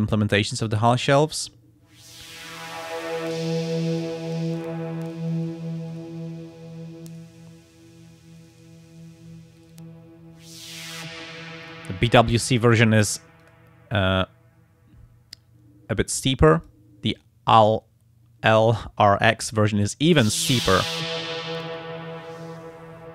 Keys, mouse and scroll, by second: 1.0 click, 3.2-5.6 drag, 5.9 click, 7.1 click, 8.4 click, 9.6 click, 11.6 click, 12.6 click, 13.4 click, 16.5 click, 21.5-23.1 drag.